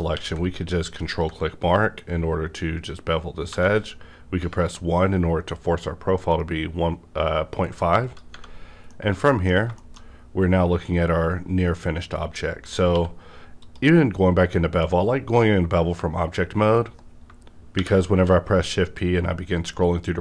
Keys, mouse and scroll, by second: 0.1 q, 1.1 ctrl+click, 2.0 scroll up 1, 2.5 scroll up 1, 3.5 1, 8.0 click, 8.1 1, 8.3 Tab, 8.6 scroll down 1, 8.9 middle click, 8.9 middle click, 9.5-10.0 scroll down 2, 9.8 shift+middle click, 12.6 scroll up 1, 12.6 scroll down 1, 12.9 q, 13.6 click, 17.2 shift+Num_Lock, 17.2 click, 17.2 q, 17.8 shift+p, 18.9 scroll up 1.